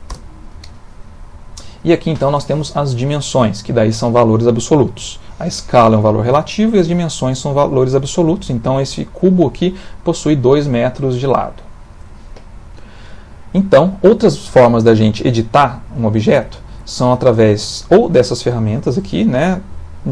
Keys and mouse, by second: 1.6 middle click, 12.7 middle click, 14.4 middle click, 15.4 ctrl+middle click, 15.9 ctrl+middle click, 16.0 shift+middle click, 16.2 shift+middle click, 16.4 ctrl+middle click, 19.5 click.